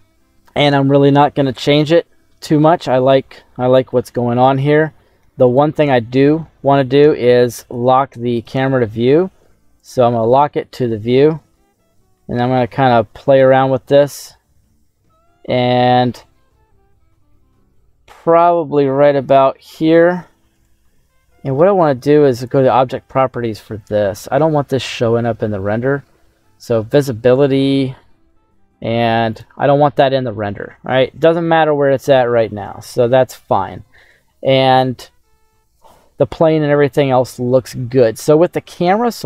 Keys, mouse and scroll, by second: 0.0 scroll down 1, 2.3 middle click, 3.8 KP_0, 5.4 right click, 6.9 n, 8.2 click, 9.7 click, 10.2 n, 10.8 middle click, 13.4 click, 14.0 middle click, 14.4-14.9 scroll down 2, 16.3 ctrl+middle click, 20.4 right click, 22.2 click, 26.8 click, 27.4-28.8 scroll down 5, 29.2 click, 34.1-35.6 scroll up 2, 35.6-37.2 scroll down 1, 38.0 right click.